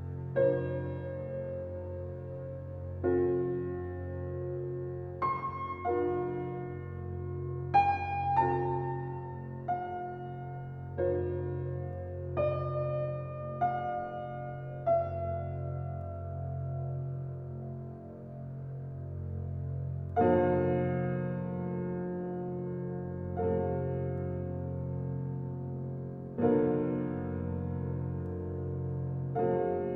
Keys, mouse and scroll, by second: 0.0 scroll down 1, 0.6-1.2 scroll up 1, 1.7-2.4 scroll down 1, 5.8-6.4 scroll down 1, 6.7 ctrl+s, 7.5-7.8 scroll up 1, 11.3 click, 12.0 scroll up 1, 13.9 click, 14.4 scroll down 1, 16.3 scroll up 1, 19.2 click, 19.5 scroll down 1, 22.2-22.6 scroll up 1, 23.2 right click, 24.2 click, 25.2 scroll down 1, 27.1-29.1 scroll up 1.